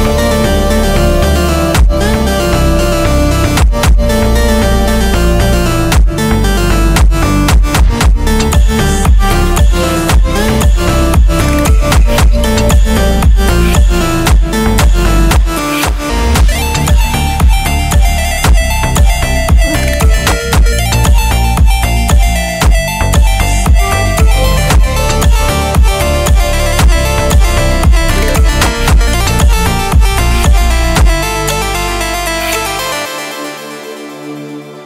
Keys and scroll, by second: 16.3 ctrl+g, 26.4 ctrl+2.